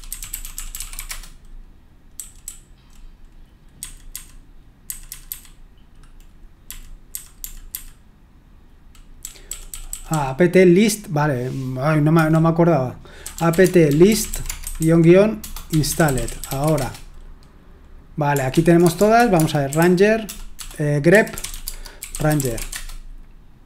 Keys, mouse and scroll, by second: 0.0-2.4 typing, 3.8-7.7 typing, 9.2-10.1 typing, 12.1-17.1 typing, 18.5 ctrl+p, 18.8-23.0 typing.